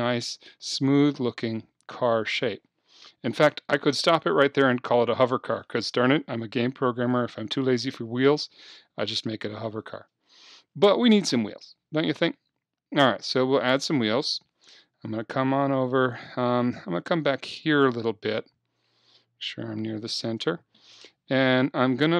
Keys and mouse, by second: 3.6-7.1 middle drag, 7.1-9.2 drag, 9.2-10.5 middle drag, 14.4 KP_3, 15.9-18.6 drag, 18.4 KP_1, 20.1 KP_3.